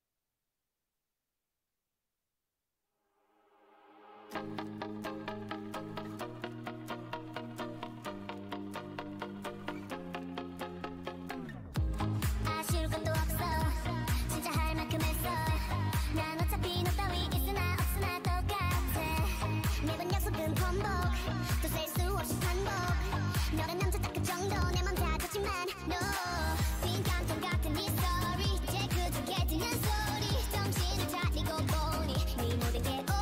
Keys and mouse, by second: 1.5-4.0 drag, 4.0-5.3 right drag, 5.3 middle click, 5.6 right click, 5.9-8.1 drag, 8.1 ctrl+j, 10.5 ctrl+z, 11.1 click, 17.6 ctrl+j, 21.0-24.1 right drag, 22.4 click, 24.1 click, 24.8-27.4 middle drag.